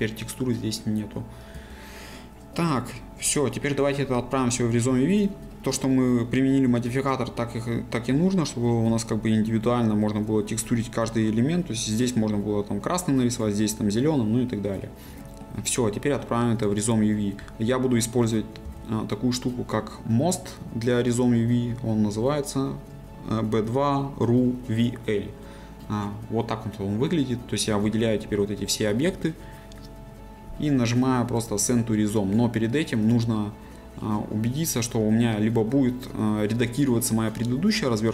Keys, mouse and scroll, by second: 1.5 a, 5.2 click, 5.5-8.7 middle drag, 8.7 scroll up 1, 9.3-14.8 middle drag, 14.8-15.2 scroll down 1, 15.2 shift+middle click, 15.6-15.9 scroll down 1, 15.9 middle click, 16.7-17.9 scroll up 1, 18.6 n, 24.9 click, 27.7 a.